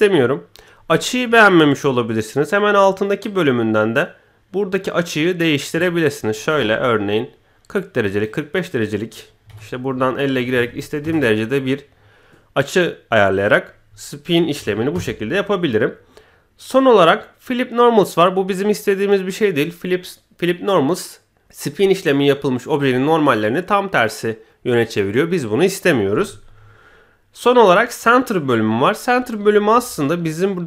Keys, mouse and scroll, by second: 3.2-8.3 drag, 8.7-11.0 drag, 10.5 BackSpace, 13.3-14.9 drag, 29.7 KP_1.